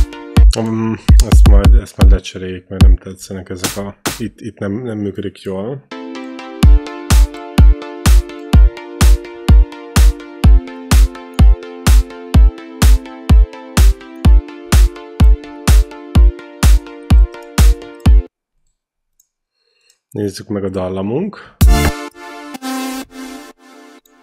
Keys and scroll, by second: 0.2 space, 0.9 q, 5.7 space, 8.9 ctrl+b, 18.0 space, 21.4 space, 22.3 q, 23.3 ctrl+c.